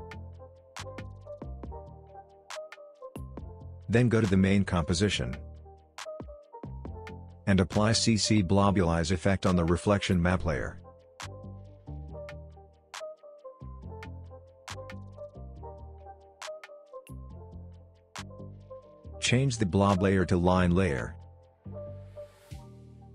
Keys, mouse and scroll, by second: 5.7-6.0 scroll up 1, 6.0-6.5 scroll down 1, 6.5-8.1 scroll up 1, 8.7 click, 9.2 ctrl+space, 9.9-10.9 typing, 11.9 BackSpace, 12.1 b, 14.1 click, 17.3-17.8 scroll up 1, 17.8 space, 17.8-18.6 click, 18.2 space, 20.1 click, 22.1-23.1 scroll down 1.